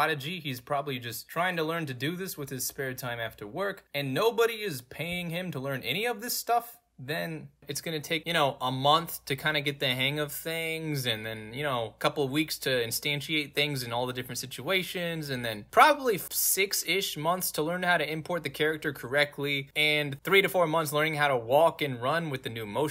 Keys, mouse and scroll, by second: 1.5 w, 2.8-7.4 typing, 8.6-9.0 scroll down 2, 8.9 middle click, 10.0 middle click, 10.0 scroll down 2, 11.1 middle click, 11.1-12.1 scroll down 3, 11.5 middle click, 12.1 scroll down 1, 14.6 middle click, 14.6 scroll down 2, 15.2 middle click, 15.2 scroll down 2, 15.9 middle click, 15.9 scroll down 2, 17.5 scroll down 2, 18.7 scroll down 2, 19.5 scroll down 2, 20.6 scroll down 2, 21.1-21.7 scroll down 3, 22.4 scroll down 2.